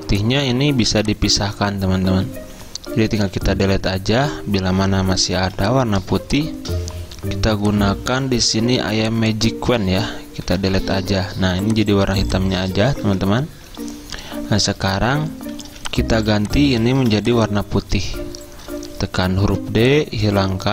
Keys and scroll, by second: 3.5 Delete, 5.4 z, 10.5 Delete, 11.5 z, 13.1 v, 14.2 Escape, 15.7 z, 16.8-17.6 typing, 19.0 d.